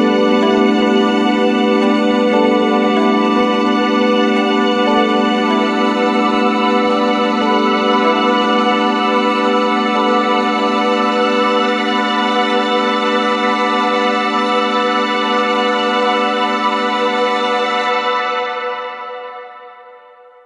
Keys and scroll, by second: 13.0 ctrl+-.